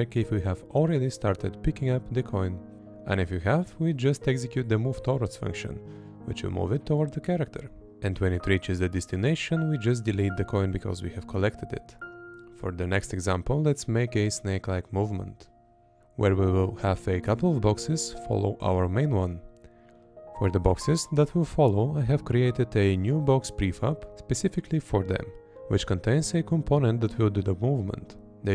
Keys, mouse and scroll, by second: 1.8 Up, 1.8 Left, 1.8 Down, 1.8 Right, 2.8 Right, 4.7 Left, 7.9 Left, 9.0 Right, 10.3 Right, 14.7 Right, 16.2 Right, 16.9 Left, 19.4 Left, 20.5 Left, 21.9 Left, 25.2 Left, 26.0 Left, 27.2 Left.